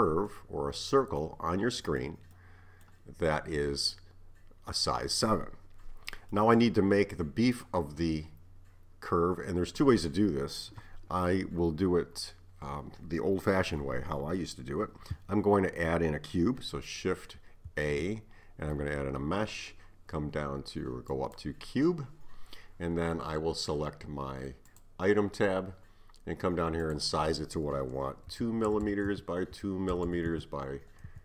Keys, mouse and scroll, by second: 0.3-3.7 middle drag, 3.7 scroll up 1, 4.0-9.3 middle drag, 17.7 shift+a, 24.7 click, 26.9-28.9 drag, 28.9 m, 30.1 m.